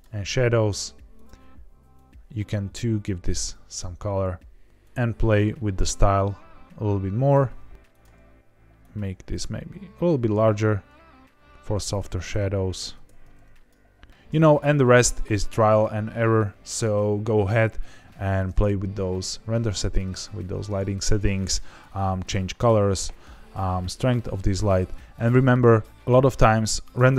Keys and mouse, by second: 1.1 click, 7.7 r, 7.7 x, 7.8 click, 8.8 click, 12.3 s, 12.9 Escape, 13.6 click, 25.1 click.